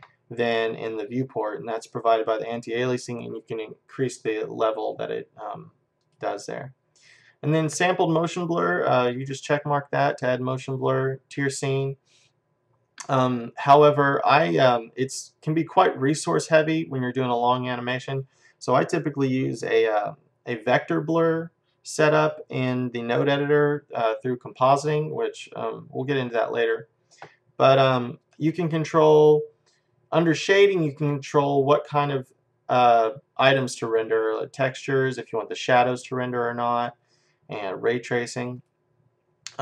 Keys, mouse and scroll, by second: 6.0-8.0 drag, 10.1-12.3 drag, 14.3-16.4 middle drag, 16.4 scroll up 1, 16.5 middle click, 16.8-18.8 middle drag, 28.3-30.1 drag, 38.6-39.6 drag.